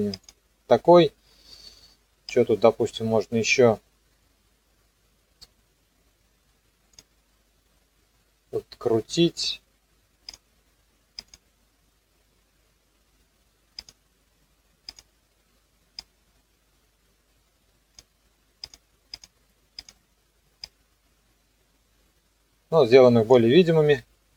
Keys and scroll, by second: 23.9 KP_0.